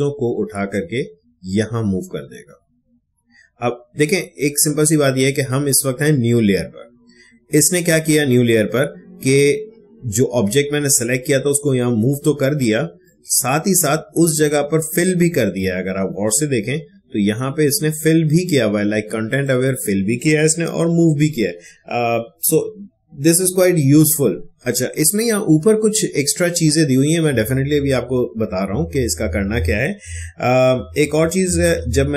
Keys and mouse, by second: 13.0 click, 15.8 space, 16.2-19.2 ctrl+drag, 20.7 ctrl+d, 29.9 ctrl+d, 30.4 ctrl+z, 31.2 ctrl+alt+z.